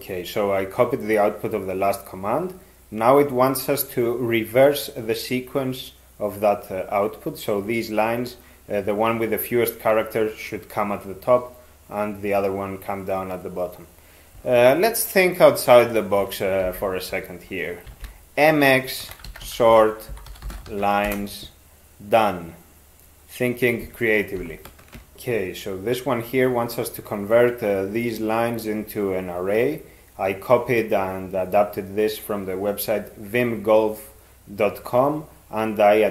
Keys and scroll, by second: 16.7 alt+h, 17.9 alt+x, 18.8-21.2 typing.